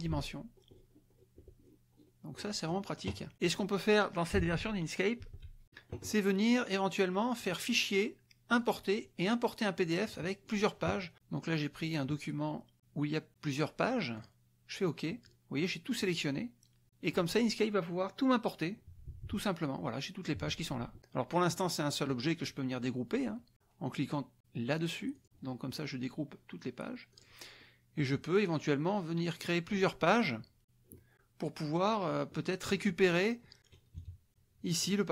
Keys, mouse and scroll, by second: 0.2-0.6 ctrl+scroll down 2, 0.6 ctrl+scroll up 2, 0.7 ctrl+scroll down 2, 1.6-2.2 ctrl+scroll down 3, 2.3-2.9 scroll up 2, 3.3 click, 4.4 alt+Tab, 5.2 alt+Tab, 7.4 click, 8.6 click, 10.4 click, 14.1 click, 18.9 KP_Subtract, 20.4 KP_Subtract, 21.0 click, 21.6 click, 25.2 click, 27.1 click, 27.6 click, 29.3 click, 32.3 click, 34.0 KP_Subtract, 34.8 click.